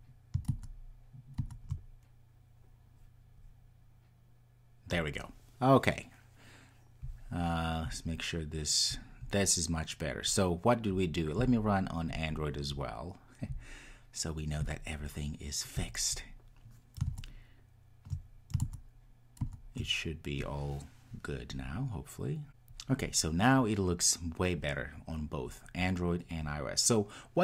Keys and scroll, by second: 16.0 ctrl+r.